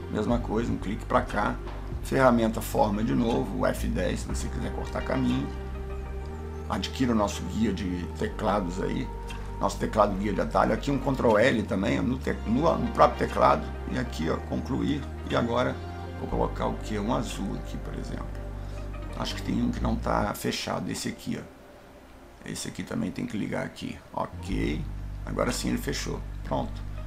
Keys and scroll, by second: 2.2 F10, 11.5 ctrl+l.